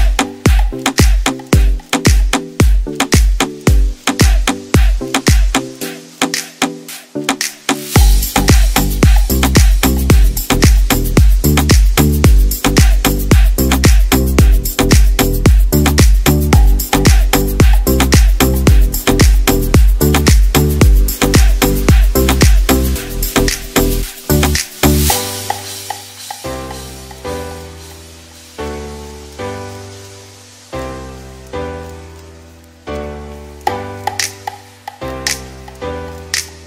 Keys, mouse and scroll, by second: 4.6 click, 18.9 click, 21.4 middle click, 23.8 middle click, 27.7 middle click, 28.7 s, 32.6 s, 35.5 click.